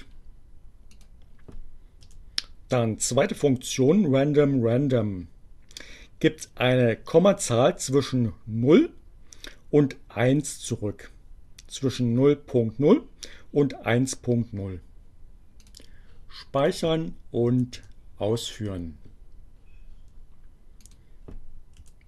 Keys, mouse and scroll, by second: 0.9 click, 2.2 Delete, 15.7 click, 16.6 click, 17.2 Up, 17.8 Return, 20.9 click, 21.8 Delete.